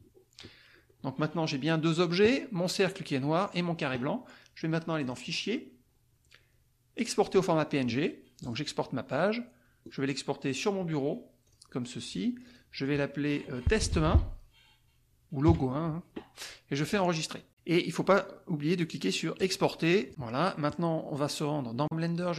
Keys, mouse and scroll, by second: 4.9 click, 7.0 click, 8.4 click, 9.8 click, 11.4 click, 12.4 click, 13.5-15.4 typing, 16.9 click, 19.4 click, 21.7 click.